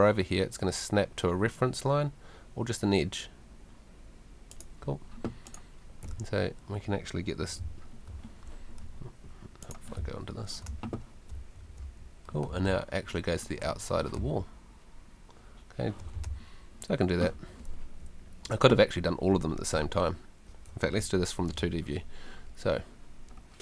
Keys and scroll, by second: 7.6 d, 10.0 d, 10.7 w, 12.2-13.1 typing, 14.2 w, 15.9-16.7 typing, 17.7 Escape, 21.0 F2.